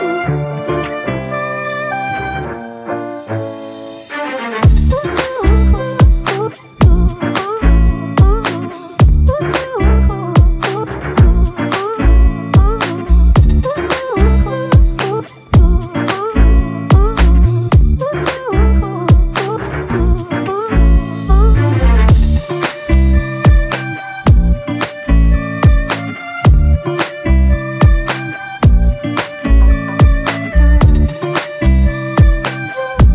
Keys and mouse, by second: 2.7 ctrl+click, 5.7 double click, 10.5 double click, 17.7 double click, 30.2 double click.